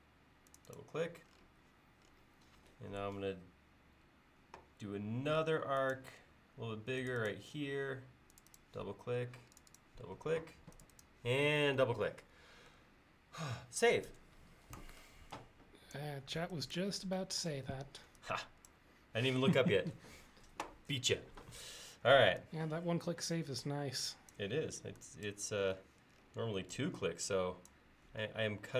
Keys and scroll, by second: 14.1 ctrl+s, 14.7 e.